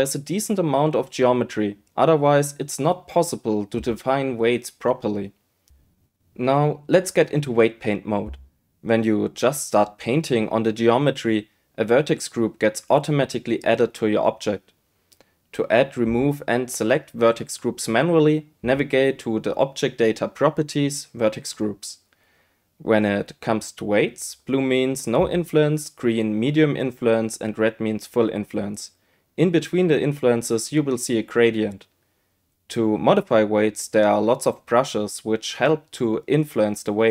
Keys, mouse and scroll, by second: 0.4 right click, 0.8 right click, 2.3 KP_7, 5.1-6.7 drag, 8.1-12.3 drag, 17.1 click, 17.5 click, 19.0 click, 19.8 click, 20.5 click, 21.2 click, 25.1-27.8 drag.